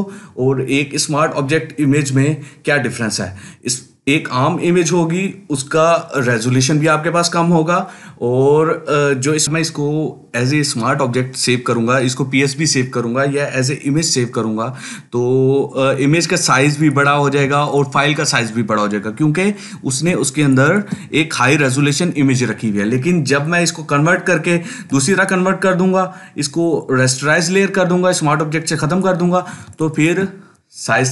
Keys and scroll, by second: 17.3 ctrl+space.